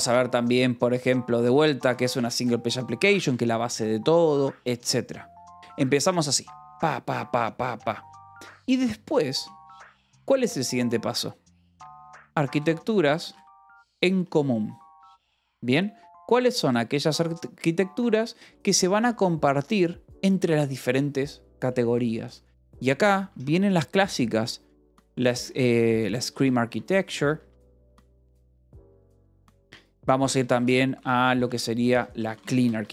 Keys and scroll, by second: 2.1-3.3 typing, 3.6 Escape, 9.6 :, 10.0 space, 11.8-14.9 typing, 17.9-18.9 typing, 19.0 Escape, 23.1-32.9 typing.